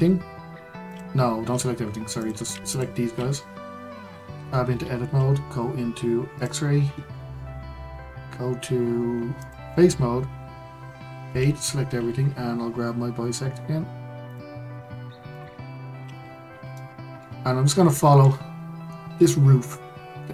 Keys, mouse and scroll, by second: 0.9 click, 2.2 click, 2.7 shift+click, 3.8-4.3 scroll up 1, 4.3 Tab, 6.3-11.2 drag, 11.2 a, 14.3-16.3 drag, 16.3-16.7 scroll up 1, 16.7-20.3 shift+middle drag.